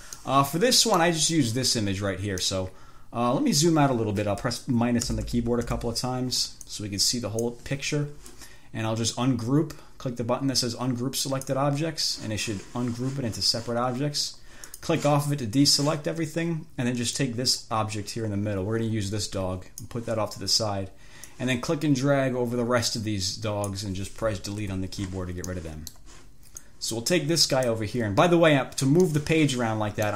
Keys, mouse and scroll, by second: 0.0 F1, 0.5-1.5 drag, 2.7-4.1 drag, 5.3 -, 6.9 click, 11.5 click, 15.0 click, 17.4-20.3 drag, 21.6-24.2 drag, 24.9 Delete, 25.8 click, 26.9-28.1 drag, 29.3-30.1 drag.